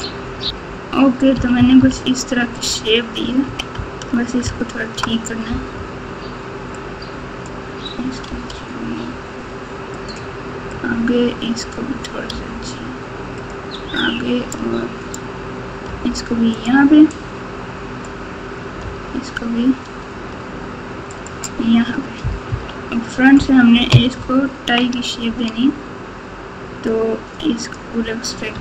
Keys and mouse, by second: 1.3 KP_6, 1.5 KP_6, 1.8 KP_6, 3.4 KP_3, 4.9 KP_Add, 5.0 KP_Add, 6.9 click, 8.2 g, 10.7 click, 12.2 g, 15.8 g, 17.2 click, 18.8 g, 22.4 KP_1, 24.1 ctrl+KP_2, 24.6 ctrl+KP_2, 24.7 ctrl+KP_2, 26.8 click.